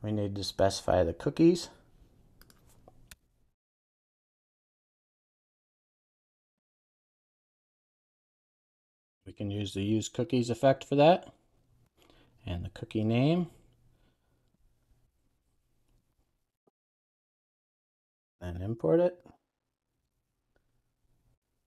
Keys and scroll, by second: 18.0 super+s, 20.1 alt+Return.